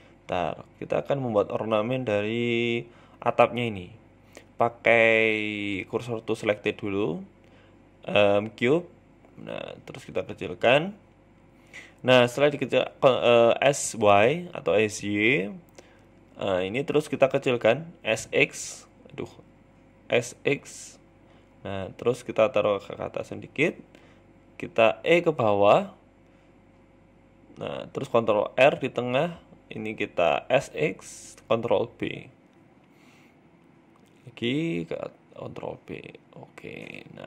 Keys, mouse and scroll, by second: 0.1 KP_1, 0.6 shift+middle click, 1.3 shift+a, 4.3 shift+s, 5.6 shift+a, 7.6 g, 8.3 scroll up 3, 8.5 shift+middle click, 8.8 s, 10.1-10.5 scroll up 2, 10.5 shift+middle click, 10.9 Tab, 11.4 middle click, 12.0 s, 14.2 KP_1, 14.6-15.4 scroll up 3, 14.8 shift+middle click, 15.4 click, 15.9 s, 17.0 s, 17.7 ctrl+z, 18.4 click, 19.1 s, 20.9 g, 21.8 s, 23.4 shift+middle click, 23.8 click, 24.5 e, 27.3 ctrl+r, 28.1 s, 29.9 ctrl+b, 33.0 s, 34.5 ctrl+b.